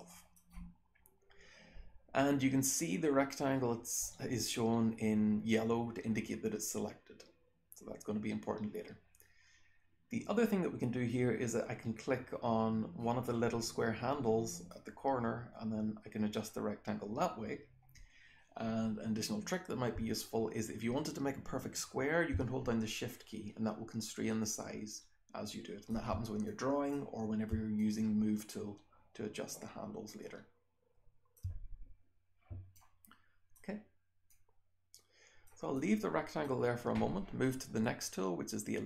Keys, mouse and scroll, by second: 0.3-13.2 scroll down 1, 13.2-13.8 scroll up 1, 13.8-14.6 scroll down 1, 14.6-25.8 drag, 14.6-22.3 scroll down 1, 22.3-25.8 shift+scroll down 1, 25.8-27.5 shift+scroll down 1, 26.4-26.9 drag, 27.5-31.3 shift+scroll down 1, 27.7-31.3 shift+drag, 31.3-32.7 scroll down 1, 32.7-33.5 drag, 34.2-35.4 drag, 35.4-36.4 scroll down 1, 35.7-36.4 drag, 36.4-38.8 scroll down 1.